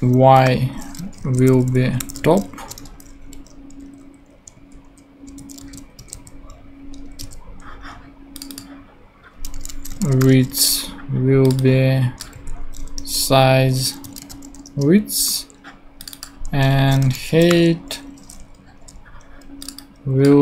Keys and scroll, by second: 0.4 y, 1.2 super+Right, 1.4 super+Left, 1.9 alt+shift+Left, 2.4-3.3 typing, 3.5 Right, 4.4 super+Right, 5.3 shift+super+Left, 5.6 shift+super+c, 5.7 super+Right, 6.0 super+Return, 6.1 super+v, 7.0 super+Return, 7.2 super+v, 9.3-10.7 typing, 12.3 s, 13.0 Return, 13.8-14.8 typing, 16.7-18.0 typing.